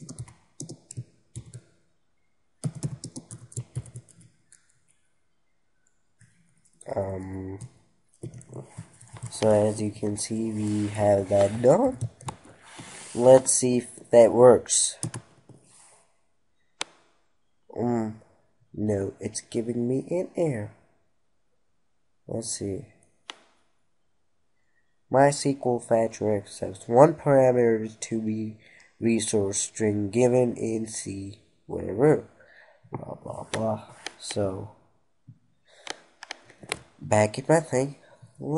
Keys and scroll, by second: 8.4 ctrl+Right, 12.4 ctrl+s.